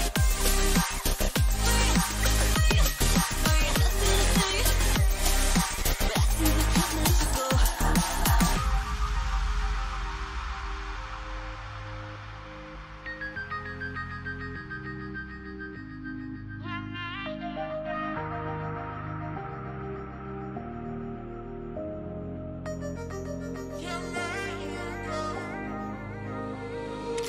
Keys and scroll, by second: 2.0 ctrl+j, 22.4 Menu, 22.6 ctrl+alt+m.